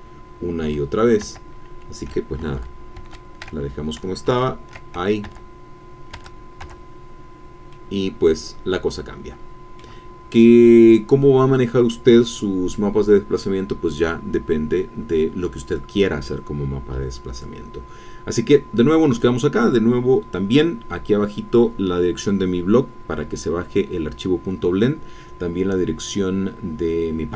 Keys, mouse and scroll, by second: 1.3 Tab, 3.0 ctrl+z, 4.3 ctrl+z, 5.3 Tab, 6.2 Tab, 7.7-10.5 middle drag.